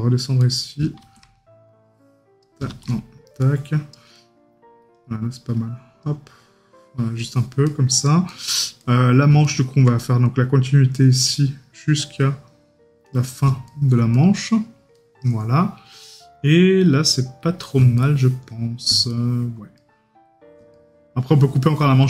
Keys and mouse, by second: 4.2 right click, 7.7 right click, 13.7 right click, 18.0 right click.